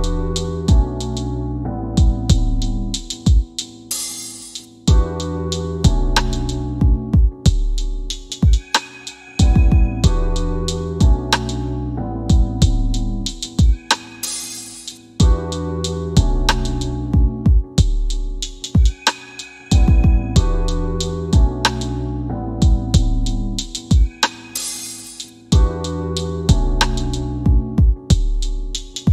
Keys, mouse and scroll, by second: 0.7 click, 2.0 KP_5, 3.0 KP_Enter, 4.5 click, 5.8 c, 14.6 click, 16.3 shift+f, 17.1 scroll down 1, 18.0 shift+f, 18.3 scroll down 1, 19.3 middle click, 20.6 click, 21.3 middle click, 24.6 click.